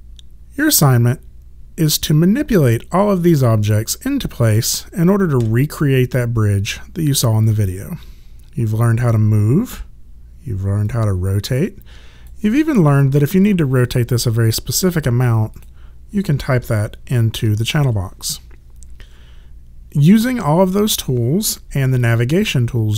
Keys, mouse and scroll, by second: 2.6 click, 5.4 w, 9.7 e, 10.9 click, 15.5 click, 17.3 KP_0, 17.8 KP_Enter, 22.0 alt+click.